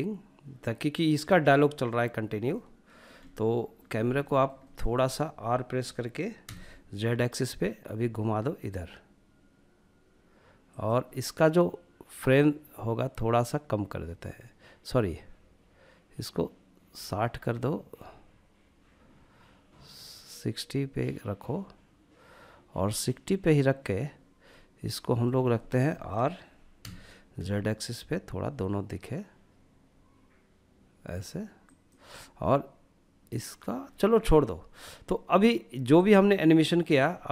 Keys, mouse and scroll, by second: 1.8-3.2 shift+middle drag, 3.2 scroll up 1, 3.5-4.9 shift+middle drag, 5.7 r, 7.2 z, 10.0 click, 11.6-23.8 drag, 23.8-26.1 middle drag, 26.1 r, 26.6 z, 30.9-33.2 drag, 35.4-36.2 drag, 37.1 click.